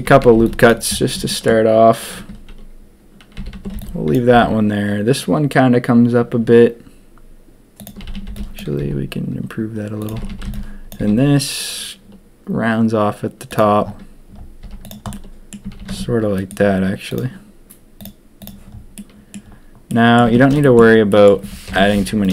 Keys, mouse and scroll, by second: 0.0 a, 0.2 a, 0.3 b, 1.2 shift+click, 3.3 a, 3.5 a, 3.7 b, 4.3 s, 8.0 a, 8.1 a, 8.2 b, 8.8 s, 10.1 a, 10.2 a, 10.4 b, 10.9 s, 13.8 s, 14.6 z, 15.1 click, 15.6 a, 15.8 a, 15.8 Tab, 16.3 right click, 17.9 click, 18.3 click, 18.9 click, 19.8 click, 19.9 middle click, 20.0 click, 20.2 Tab, 20.6 shift+middle click, 20.6 shift+click, 21.1 click, 21.6 ctrl+KP_3, 21.9 z.